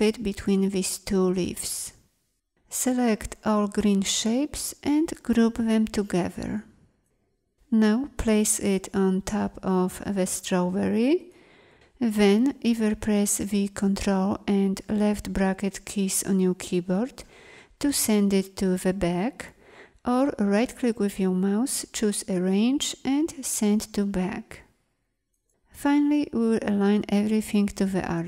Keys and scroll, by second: 13.8 ctrl+[.